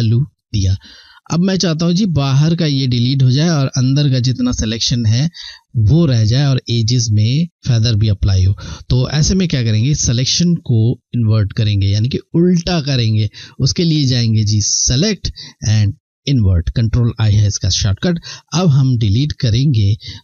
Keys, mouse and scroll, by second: 14.5 click.